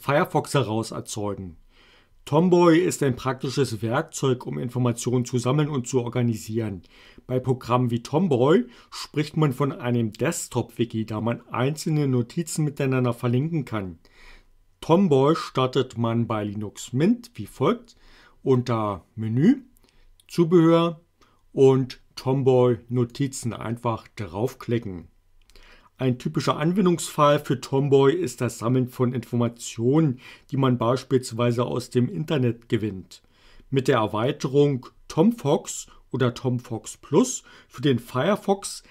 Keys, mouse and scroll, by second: 23.2 click.